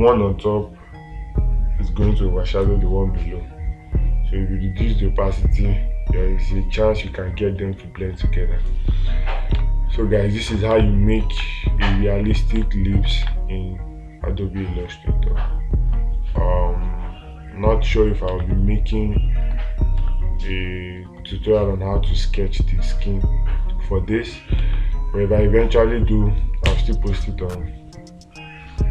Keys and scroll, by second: 13.7 space, 18.8 space, 20.5 space, 25.1 space.